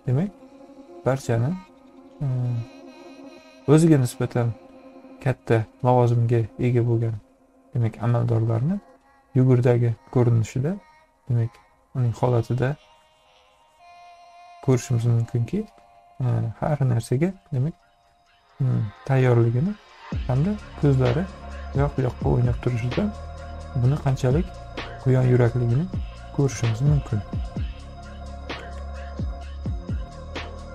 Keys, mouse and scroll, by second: 0.2 space, 0.5 click, 20.8 =, 30.1 ctrl+-.